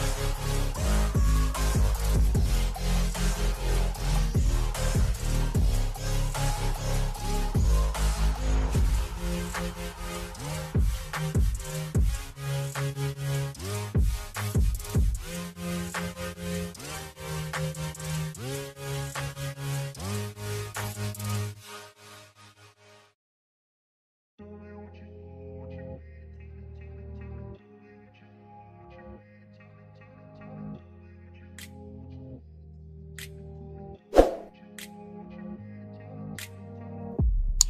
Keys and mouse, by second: 0.8 click, 3.2 click, 4.2 click, 5.5 Return, 8.2 click, 9.8 click, 11.2 Return, 12.2 click, 13.2 KP_6, 13.6 KP_Enter, 15.0 click, 15.7 KP_7, 16.0 Return, 16.6 Right, 18.6 Right, 19.4 click, 20.3 KP_8, 20.6 KP_Enter, 21.4 Right, 22.9 Down, 23.4 Up, 23.8 Down, 25.4 click, 28.0 z, 30.2 click, 32.3 click, 34.1 click, 35.7 click, 36.8 click, 37.0 click.